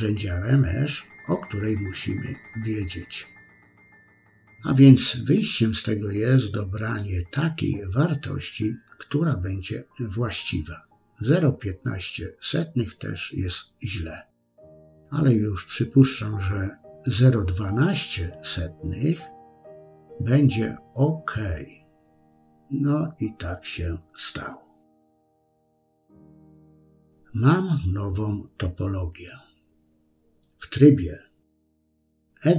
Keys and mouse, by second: 1.5 ctrl+z, 4.1-10.9 drag, 6.0 BackSpace, 12.8 ctrl+z, 14.9-22.1 drag, 17.4 BackSpace, 22.6-24.9 middle drag, 25.7 KP_1, 28.0 Tab.